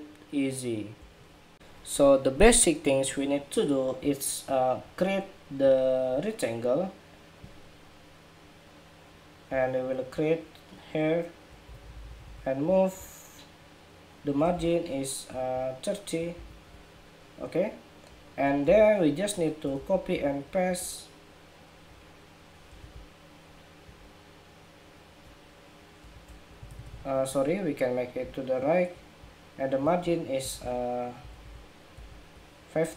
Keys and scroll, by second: 14.2 super+=, 16.1 alt+shift+Down, 18.7 super+-, 19.5 super+c, 20.1 super+v, 22.5 super+z, 25.8 super+z, 29.5 alt+Right, 30.2 alt+Right, 30.3 alt+Right, 31.4 alt+Right, 31.8 alt+Right.